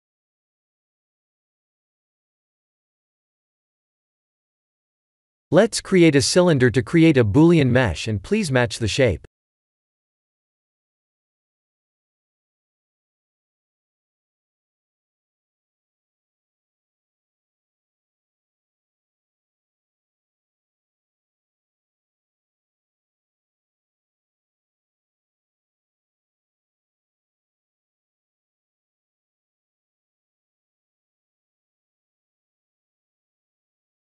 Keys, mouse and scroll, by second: 0.0 middle click, 0.2 middle click, 0.4 middle click, 1.1-2.3 middle click, 2.3 click, 2.9 middle click, 3.1 middle click, 3.4 middle click, 3.5 middle click, 4.0 middle click, 4.4 middle click, 4.4 KP_1, 4.8 KP_7, 5.7 shift+a, 9.3 r, 11.3 s, 14.4 middle click, 14.4 middle click, 14.5 middle click, 14.9 middle click, 15.1 middle click, 15.4 middle click, 16.0 middle click, 17.7 middle click, 22.4 KP_7, 23.7 s, 28.1 shift+z, 29.2 middle click, 29.3 middle click, 29.9 middle click, 30.0 middle click, 30.2 middle click, 31.7 middle click, 33.5 middle click, 33.5-34.0 scroll up 4.